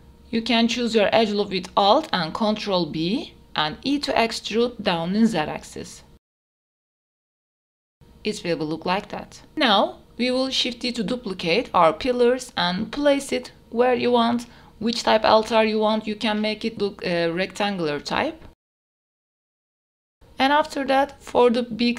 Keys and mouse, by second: 0.3 middle click, 0.9 middle click, 1.1 g, 1.2 z, 1.5 click, 1.7 Tab, 1.7 click, 1.9 Tab, 2.1 shift+click, 2.5 2, 3.1 alt+click, 4.0 ctrl+b, 6.7 e, 7.7 click, 7.9 Tab, 8.3 click, 8.6-9.1 drag, 9.1 middle click, 9.4 shift+middle drag, 9.8 middle drag, 11.3 KP_7, 12.7-13.8 drag, 13.9 shift+d, 15.9 middle click, 16.2 g, 16.3 z, 16.7 click, 16.9 g, 17.9 middle click, 18.1 KP_0, 18.9 KP_7, 19.1 shift+d, 19.7 middle click, 20.1 Tab, 20.1 shift+a, 21.0 s.